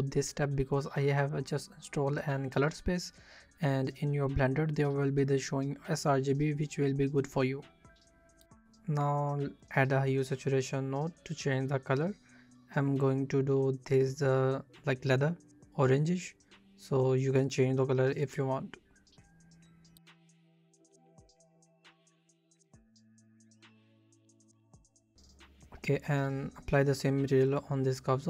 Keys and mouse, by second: 0.5 middle click, 0.5 click, 1.8 alt+shift+z, 2.5 shift+click, 4.2 s, 4.6 click, 5.0 s, 5.4 click, 6.5 s, 7.5 shift+click, 8.2 middle click, 8.5 shift+a, 13.1-17.1 shift+drag, 21.1-23.0 drag, 24.3 Tab, 25.3 alt+shift+z, 26.2 click, 27.6 ctrl+l.